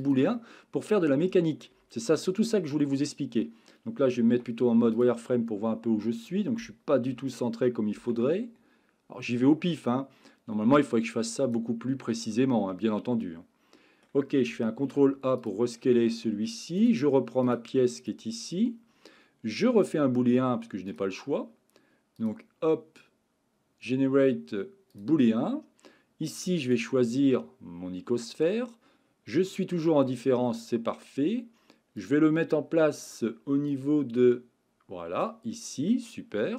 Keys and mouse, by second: 0.0 click, 0.3-1.6 middle drag, 2.2 KP_1, 4.3 z, 7.1 g, 7.9 x, 11.3 click, 12.2-14.0 middle drag, 14.8 ctrl+a, 16.1-16.5 middle drag, 16.8 click, 17.4 click, 22.3-25.1 drag, 26.6 click, 32.0 click, 33.7-35.2 drag, 35.9-36.5 middle drag.